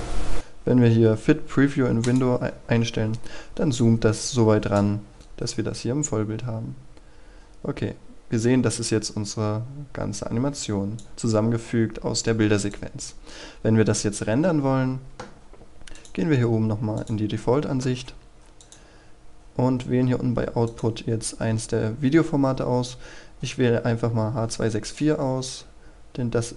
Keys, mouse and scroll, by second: 5.1 scroll up 1, 5.2-21.7 drag, 25.8-26.5 scroll down 1.